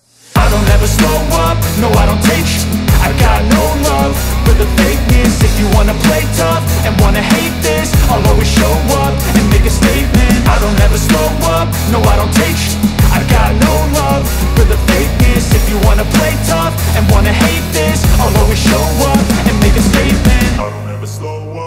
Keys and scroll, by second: 8.4 Escape, 8.8 F2, 18.8 Escape, 20.6 ctrl+q.